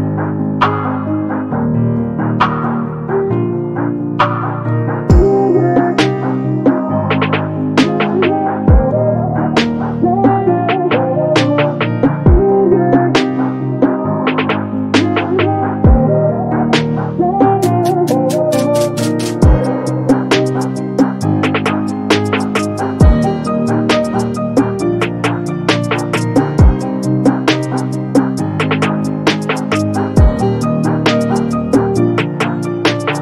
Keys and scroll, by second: 17.4 space.